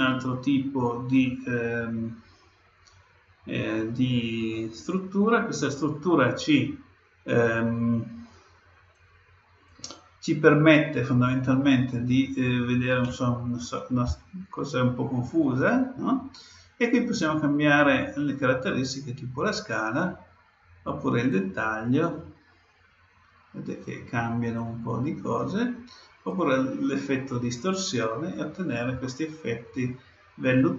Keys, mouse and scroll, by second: 8.9-10.7 drag, 17.2-19.1 drag, 21.3-23.2 drag, 24.5-28.0 drag, 29.0-30.7 middle drag.